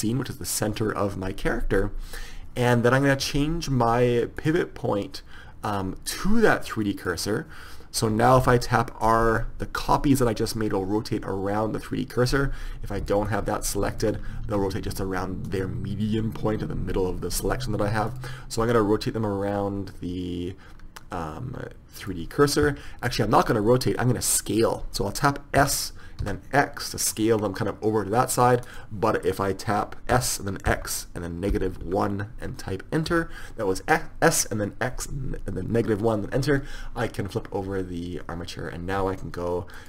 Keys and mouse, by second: 4.5-6.2 drag, 9.6 r, 13.1-15.3 drag, 14.6 r, 18.2-19.9 drag, 25.9 s, 30.3 s.